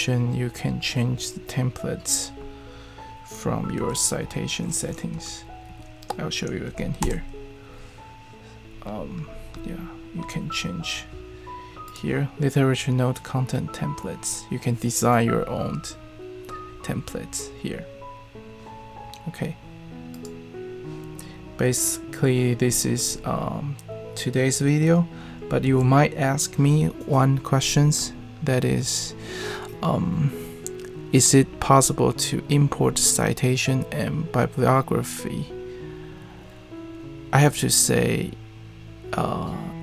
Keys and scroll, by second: 3.7 super+p, 4.2-5.1 typing, 5.7 Escape, 7.0 super+,, 25.6 super+e.